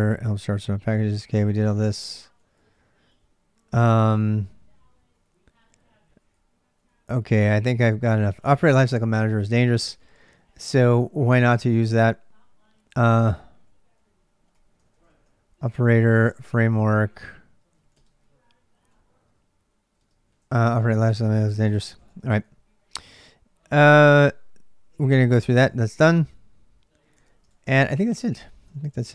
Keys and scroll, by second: 0.0-9.4 typing, 12.9-18.2 typing, 19.7-27.9 typing, 21.5 ctrl+[, 22.0 Return, 28.5 ctrl+a, 28.7 ctrl+a.